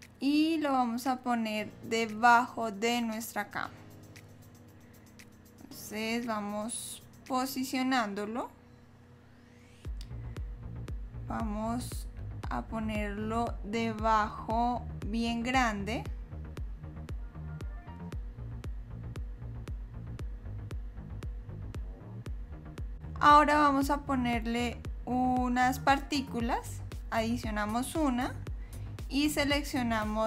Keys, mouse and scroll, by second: 1.2 click, 4.4 click, 7.6 click, 10.7 KP_7, 12.5 click, 24.7 click, 26.8 click.